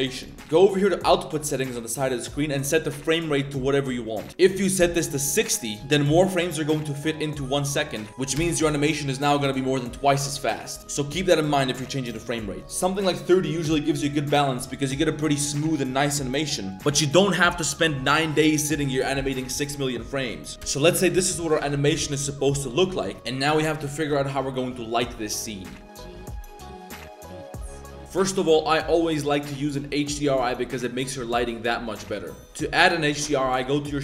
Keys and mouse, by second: 3.1-5.4 drag, 5.9-7.9 drag, 8.4 space, 10.8 space, 12.3-13.4 drag, 20.6 space, 24.8 click, 28.3-29.1 middle drag, 29.2-29.9 middle drag, 29.5 click, 29.9 middle drag, 30.4 middle drag, 30.9 middle click, 31.2 middle drag, 31.5-32.0 middle drag, 32.0 click.